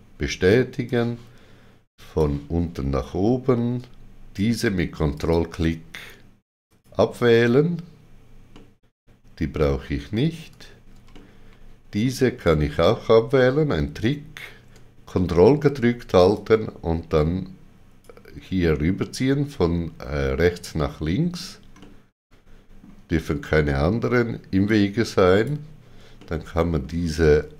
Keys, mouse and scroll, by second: 0.8 shift+click, 5.1 ctrl+click, 6.6 ctrl+click, 8.5 middle click, 11.1 middle click, 16.3 ctrl+click, 20.8 middle click, 21.8 middle click, 24.6 ctrl+click, 26.1 middle click.